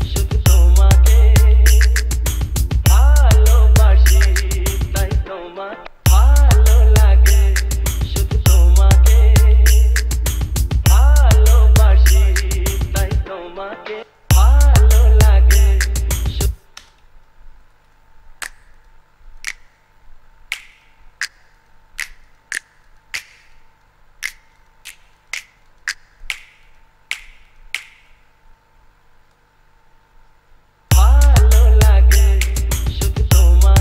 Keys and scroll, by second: 6.0 space, 14.5 space, 16.6 space, 31.1 space.